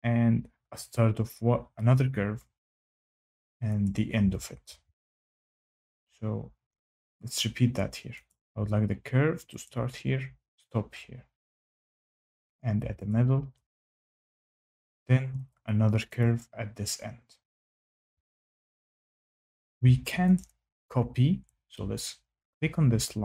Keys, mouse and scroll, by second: 0.9 click, 3.8 click, 4.6 Escape, 8.2 click, 9.6 click, 13.0 click, 16.1 click, 17.8 click, 18.0 Escape, 19.6 Escape, 20.3 click.